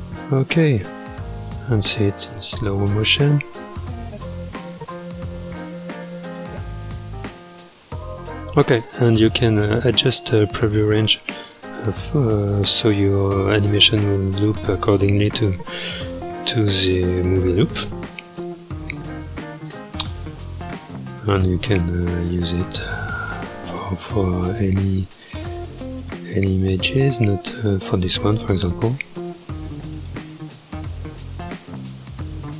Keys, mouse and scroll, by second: 0.1 space, 1.5-9.1 drag, 9.1 space, 9.9 click, 10.8 space, 19.6-24.2 drag, 24.5-26.7 drag, 26.7-27.6 scroll down 1, 27.6 click, 28.3-29.4 scroll up 1, 29.4-29.9 scroll up 3, 29.9-32.5 drag.